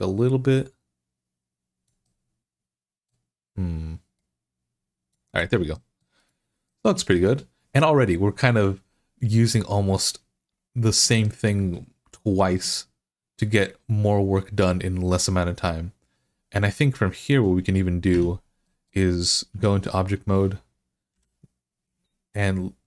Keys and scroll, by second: 17.9 Tab, 21.0 i.